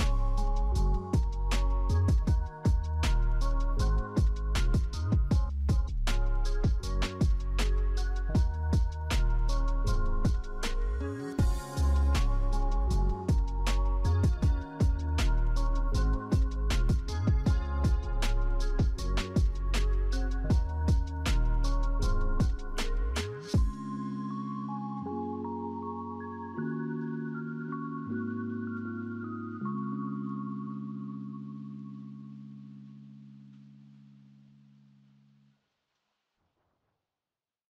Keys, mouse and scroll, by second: 2.2 double click, 3.7 double click, 4.4 double click, 6.0-9.3 typing, 18.5 double click, 37.2 right click.